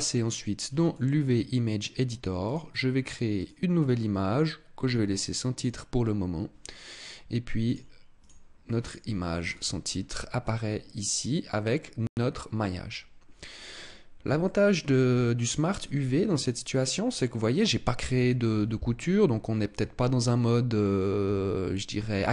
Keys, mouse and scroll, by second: 0.1 click.